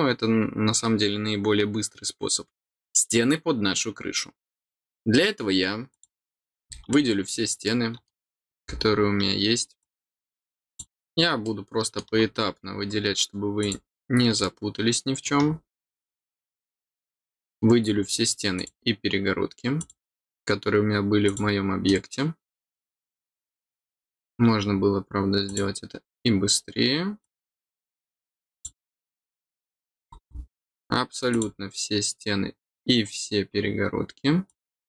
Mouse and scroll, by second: 5.9 click, 7.2 middle click, 8.3-8.8 scroll down 2, 9.7 click, 10.6 click, 11.4 middle click, 13.5 click, 14.3 middle click, 16.3 click, 16.9 middle click, 18.5 click, 19.7 click, 21.2 click, 21.8 middle click, 23.4 middle click, 25.4 click, 27.2 click, 28.5 click, 29.1 middle click, 30.0 scroll up 1, 31.2 click, 34.4 click.